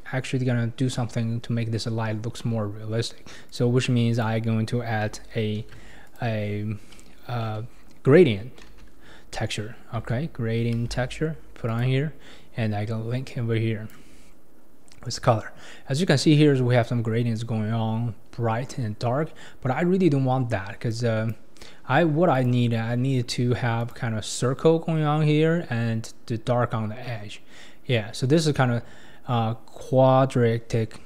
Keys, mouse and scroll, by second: 3.5 click, 4.1 click, 5.6 shift+a, 13.3-16.3 drag, 20.9-21.9 drag, 21.9-22.3 scroll up 3, 22.3-25.4 drag, 27.6-28.5 scroll down 4, 28.5-29.6 scroll up 4, 29.6-31.0 scroll up 4.